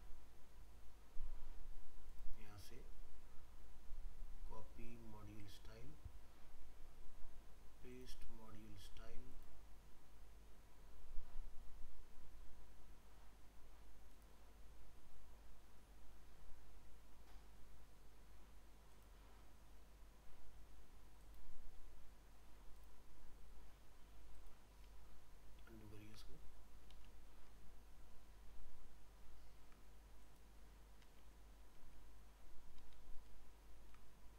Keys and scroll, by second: 25.0 ctrl+z.